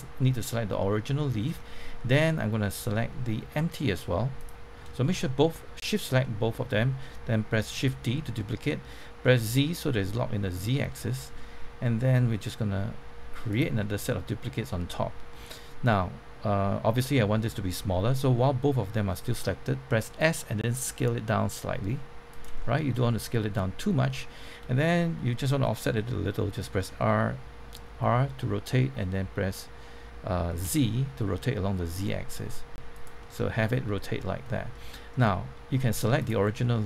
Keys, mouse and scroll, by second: 1.0 middle click, 2.2 middle click, 4.4 shift+click, 5.0-6.0 middle drag, 7.7 shift+d, 9.2 z, 13.4 click, 13.7-16.0 middle drag, 20.0 s, 22.2 click, 22.5-24.0 middle drag, 26.7 r, 32.9 click, 33.1-35.2 middle drag, 36.2 click, 36.6 middle click.